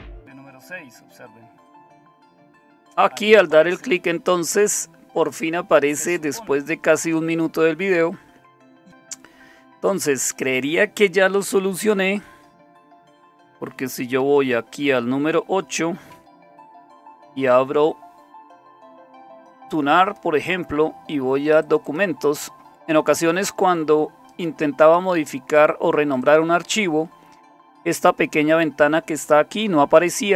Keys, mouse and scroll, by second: 8.5-9.5 drag, 11.9 super+7, 14.2 super+8, 16.6 alt+super+f, 20.0 click, 21.6 click, 24.3 right click, 24.6 right click, 26.2 click.